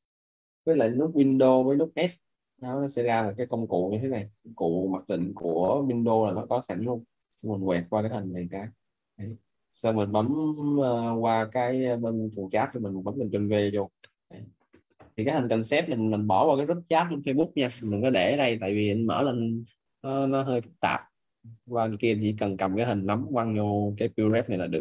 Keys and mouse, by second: 1.8 shift+super+s.